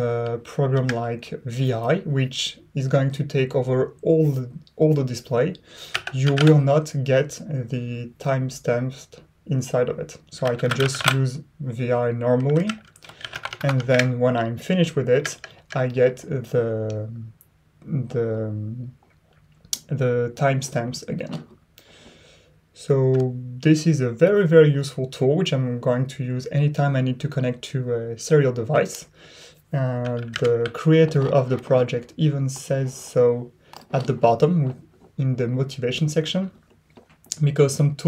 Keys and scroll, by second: 0.7 Return, 5.6-6.8 typing, 10.2-11.4 typing, 12.6 Escape, 13.0-14.0 typing, 15.1 Return, 15.3 Return, 15.4 Return.